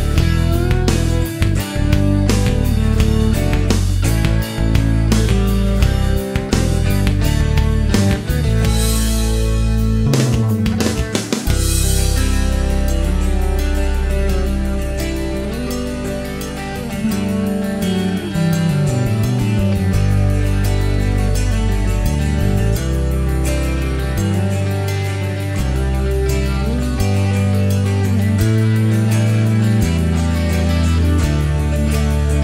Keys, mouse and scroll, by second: 0.7 middle click, 1.6 middle click, 3.3 click, 7.3 click, 8.2 click, 10.0 click, 10.9 click, 13.3 click, 14.3 click, 17.0 click, 17.7 click, 20.9 click, 21.6 click, 22.0 right click, 22.8-23.2 scroll up 1, 23.3 middle click, 23.6 scroll up 1, 25.5 click, 26.7 click, 28.0 click, 29.5 click, 30.7 click, 32.3 click.